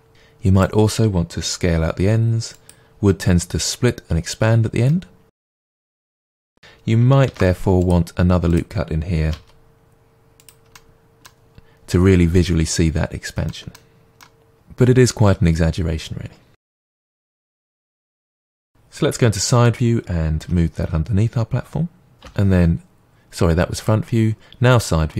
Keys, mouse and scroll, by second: 0.1 click, 1.4 s, 2.6 click, 4.9 middle click, 5.6 click, 5.9 s, 6.4 click, 7.3 ctrl+r, 8.5 click, 9.4 s, 10.4 click, 10.8-16.7 middle drag, 16.7 ctrl+r, 17.1 click, 17.3 s, 17.5 click, 17.6 middle click, 17.7 Tab, 17.8 middle click, 19.0 KP_1, 20.4 g, 22.1 click, 22.2 KP_3.